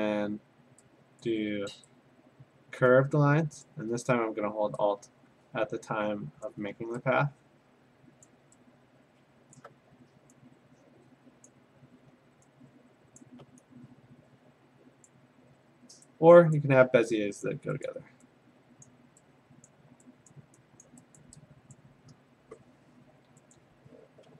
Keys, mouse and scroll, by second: 1.2 click, 3.6 click, 6.4 alt+click, 8.2 click, 9.6 alt+click, 11.5 click, 13.2 click, 15.1 click, 16.6 click, 17.5 click, 17.9 click, 18.9 click, 20.0 click, 20.3 click, 20.8 click, 21.2 click, 21.8 click, 23.6 click.